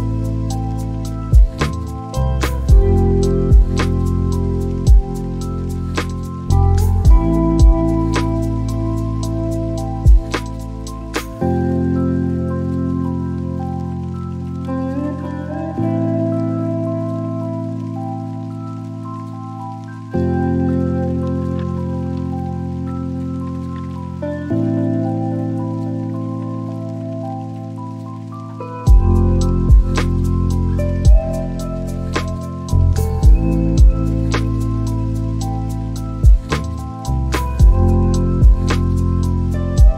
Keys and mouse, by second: 5.2 click, 6.7-7.4 right drag, 8.6-9.1 right drag, 9.9 click, 18.8-23.1 drag, 24.0-32.7 drag.